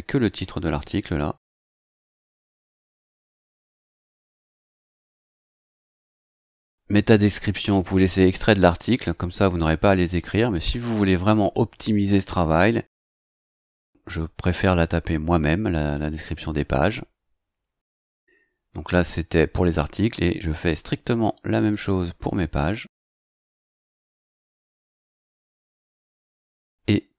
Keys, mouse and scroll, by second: 1.6 click, 2.7 BackSpace, 5.0 scroll down 1, 12.9 click, 13.7 BackSpace, 16.6-17.0 scroll down 2, 18.3-19.1 scroll up 4, 19.4-20.7 scroll down 3, 21.7 click, 22.1 BackSpace, 24.3 click, 24.5 BackSpace, 25.3 scroll down 2, 26.2-26.5 scroll down 2.